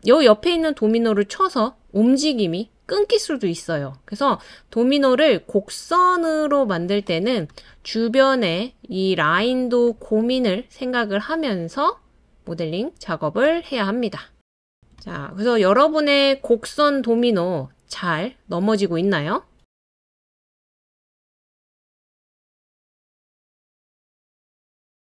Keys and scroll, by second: 18.3-19.0 typing.